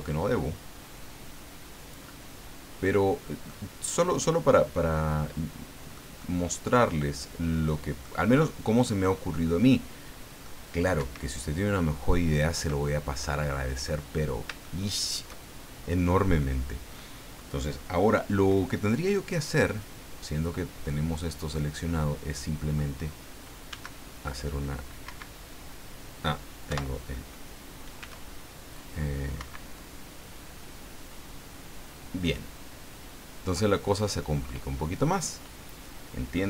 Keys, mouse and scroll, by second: 3.5-6.1 middle drag, 6.2-8.2 middle drag, 8.6-10.6 middle drag, 11.0 Escape, 12.0-12.3 scroll down 2, 12.8 middle click, 13.7 click, 14.1-14.4 scroll up 2, 14.6 shift+middle click, 14.6 shift+scroll up 2, 19.6-22.9 middle drag, 23.7 s, 25.1 Escape, 26.7 o, 28.0 s, 29.4 Escape.